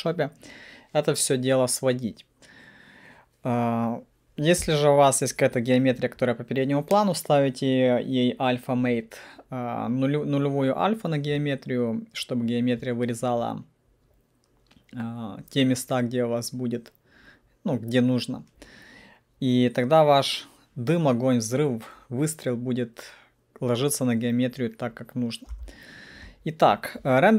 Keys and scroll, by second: 25.6 p.